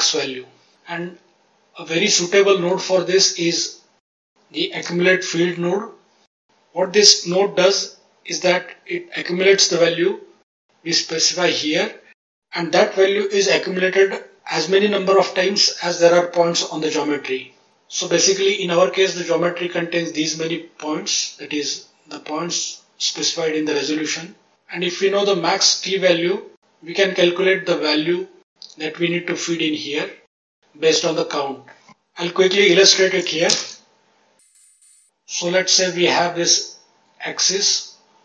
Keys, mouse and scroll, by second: 2.6-3.1 middle drag, 4.7 shift+a, 25.0 click, 33.4 shift+space, 35.0 click, 37.5 click.